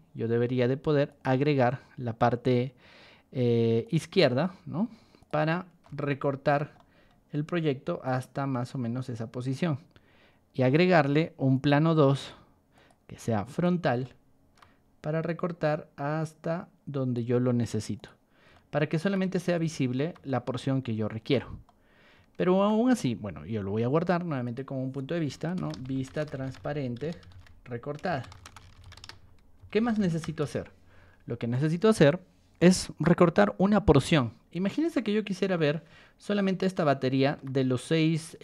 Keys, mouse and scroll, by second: 1.0 shift+click, 5.1 shift+click, 5.8-6.5 shift+middle drag, 6.7 middle drag, 8.0 click, 10.6 click, 11.5 click, 12.1 click, 12.7 click, 13.5 click, 14.0 shift+middle click, 15.2-17.1 drag, 17.9 click, 18.5-19.0 shift+middle drag, 19.2 middle click, 20.2-21.3 shift+middle drag, 21.6-22.6 middle drag, 25.5-28.7 typing, 29.7 t, 30.2 Return, 31.5 click, 34.7 scroll up 2, 35.3 scroll up 2, 35.5-37.3 middle drag, 37.9-38.4 scroll up 4.